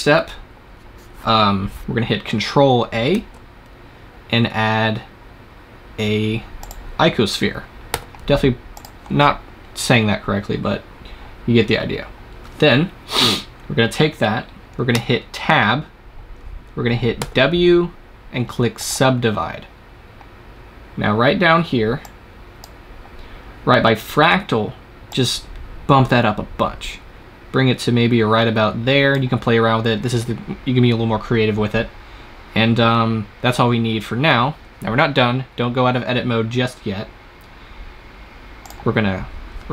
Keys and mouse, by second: 3.1 shift+a, 7.8 s, 8.8-11.0 drag, 14.8 Tab, 17.0 w, 21.9-24.9 drag, 25.0-28.6 drag, 38.5-39.7 drag.